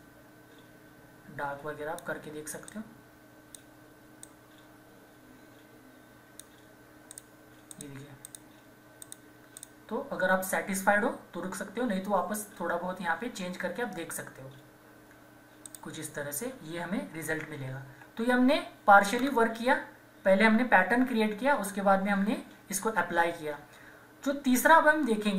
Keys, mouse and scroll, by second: 15.6 click, 17.2 ctrl+-, 17.6 ctrl+=, 19.1 scroll down 1.